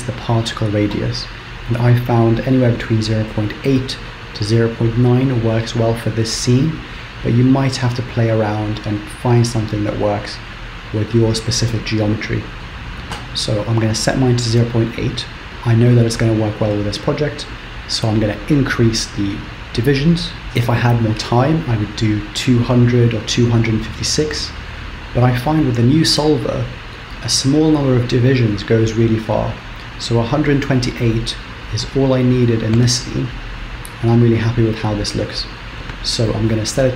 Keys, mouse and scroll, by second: 16.7-19.5 scroll up 17, 19.5 click.